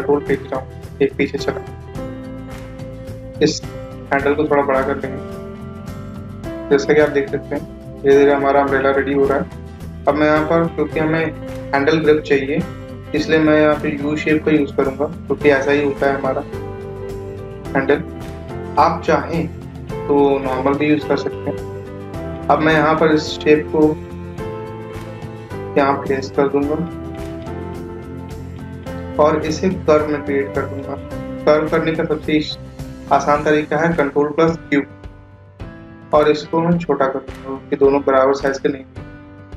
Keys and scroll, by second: 28.1 ctrl+q.